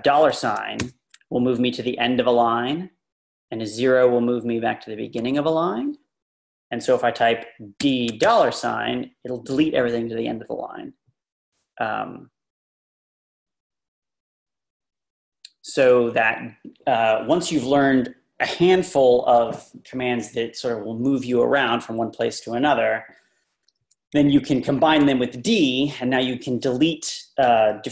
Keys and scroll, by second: 0.8 shift+4, 5.2 0, 7.5-8.7 typing, 15.9 u, 23.8 Tab.